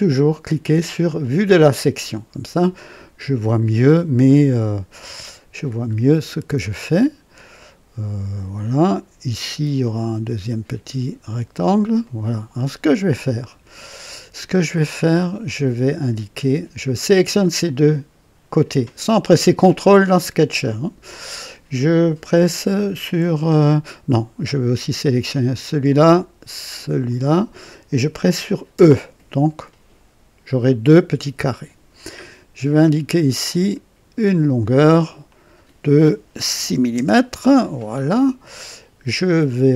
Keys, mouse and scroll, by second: 1.2 click, 5.9 scroll up 1, 9.8 click, 11.2 click, 12.0 right click, 13.0 right click, 13.9 right click, 15.4 click, 17.0 click, 25.2 click, 27.0 click, 28.7 e, 33.4 click, 35.3 click, 36.5 KP_6, 36.9 KP_Enter.